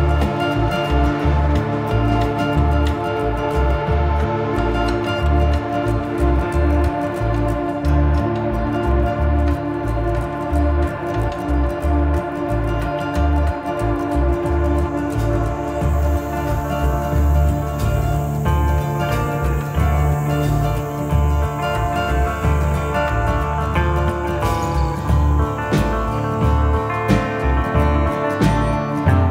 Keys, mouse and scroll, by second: 0.6 click, 0.8 shift+middle click, 1.1 scroll up 1, 2.3 click, 2.5 middle click, 2.7 click, 3.0 middle click, 3.7 click, 4.6 click, 5.0 middle click, 5.5 click, 5.9 middle click, 6.2 click, 7.7 middle click, 8.6 click, 11.5 click, 12.5 click, 14.3 click, 14.8 middle click, 15.3 middle click, 16.0 middle click, 16.5 middle click, 17.3 shift+middle click, 18.1 ctrl+i, 19.3 click, 22.1 click, 23.3 click, 23.5 shift+middle click, 25.4 click, 26.6 middle click, 27.3 middle click, 28.0 click, 28.2 middle click, 28.4 click.